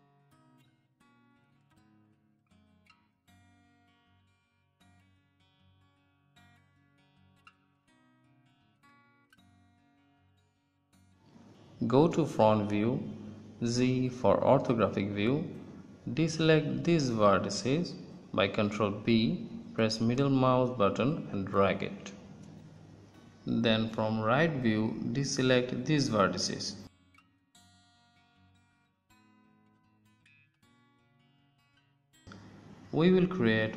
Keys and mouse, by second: 11.6 middle click, 12.0 KP_1, 13.6 z, 14.9 b, 17.6 b, 19.6 z, 23.4 KP_3, 26.9 b.